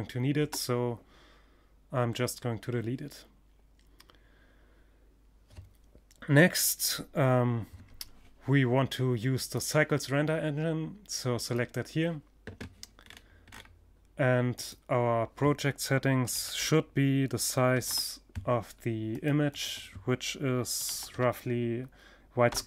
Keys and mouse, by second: 9.5 click, 12.0-13.0 middle drag, 13.0-14.8 drag, 17.9-19.8 drag.